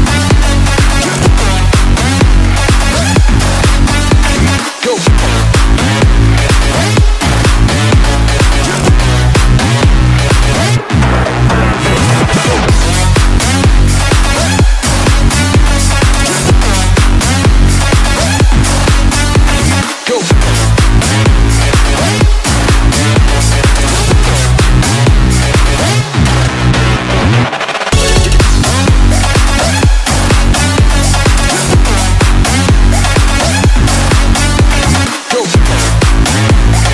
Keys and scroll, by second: 0.0-0.2 typing, 8.1-8.8 typing, 10.2 ], 13.6 [, 15.8 space, 23.1-24.6 typing, 30.6 ], 30.6 ], 31.2 ].